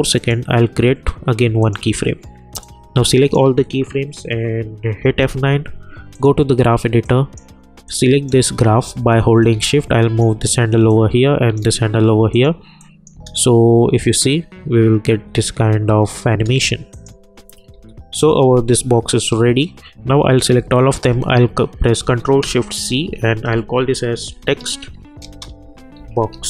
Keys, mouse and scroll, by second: 0.1-5.0 drag, 5.0 F9, 6.1-10.9 drag, 10.9-12.3 drag, 13.1 space, 16.3 space, 16.9 click, 17.7 u, 20.5 ctrl+a, 22.8 ctrl+shift+c, 24.0-26.4 typing.